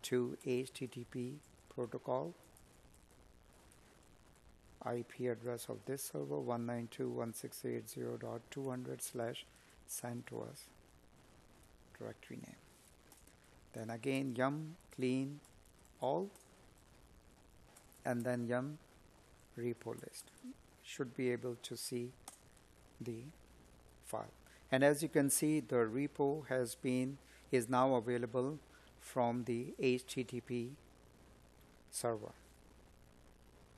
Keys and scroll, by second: 9.1 Escape, 13.0 space, 14.4 space, 17.0 space.